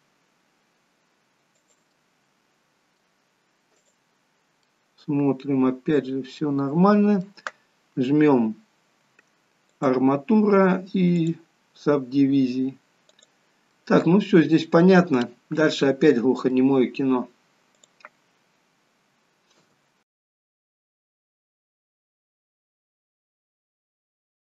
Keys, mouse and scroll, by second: 2.2 middle click, 4.2 click, 4.9 middle click, 10.0 click, 13.3 click, 14.0 middle click, 15.2-15.8 scroll down 5, 16.1 middle click, 17.0-17.3 scroll up 2, 18.0 click, 19.8 e, 20.3 middle click, 20.4-20.8 scroll up 2, 20.5 middle click, 20.8-23.7 typing, 21.0 middle click, 21.1 scroll down 2, 21.6 click, 21.9 click, 22.1 middle click, 22.4 scroll up 2, 22.7 click, 23.0 middle click, 23.5 scroll down 2, 23.7 click, 23.9 middle click, 24.3 click.